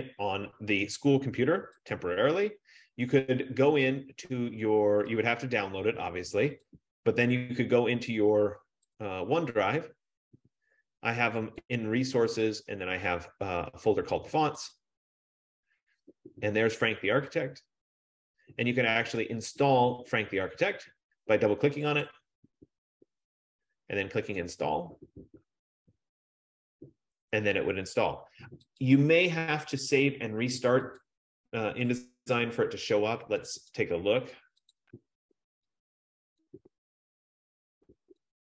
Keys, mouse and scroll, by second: 2.1 click, 4.0 F15, 5.5 click, 7.0 click, 9.2 click, 11.5 click, 12.1 click, 15.0 click, 15.4 click, 17.3 click, 17.6 click, 22.1 click, 22.3 click, 24.8 click, 29.8 click, 31.2 click, 33.9 click, 35.2 click, 35.3 click, 36.6 click.